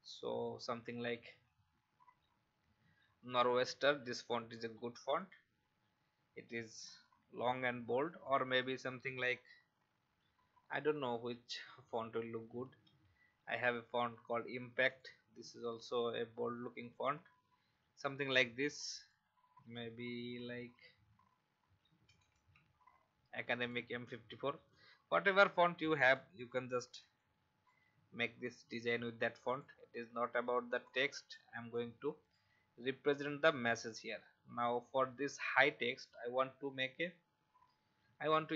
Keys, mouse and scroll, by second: 0.9-2.0 typing, 3.3-9.5 drag, 12.3-13.3 typing, 14.9 click, 21.4-22.8 typing, 23.5-24.7 drag, 25.1-26.0 scroll up 1, 26.0 click, 30.8 alt+shift+click, 31.7-32.8 drag, 36.8-37.9 scroll down 1.